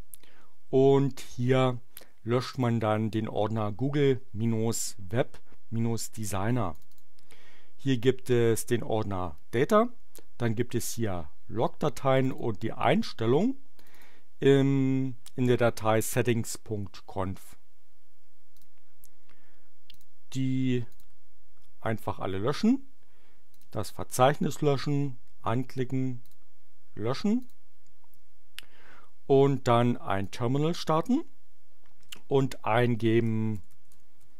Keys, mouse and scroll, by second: 2.5 click, 6.7 click, 12.2 click, 13.7 click, 18.5 click, 19.9 click, 20.9 click, 23.5 click, 24.2 right click, 26.2 click, 27.4 click, 30.2 click, 33.3-34.3 typing.